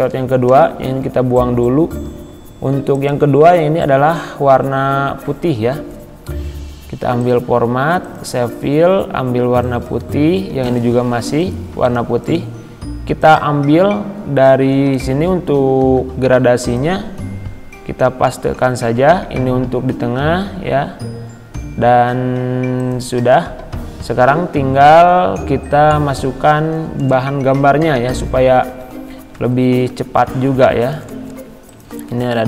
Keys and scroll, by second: 0.5 Delete, 15.8 ctrl+c, 18.6 ctrl+v.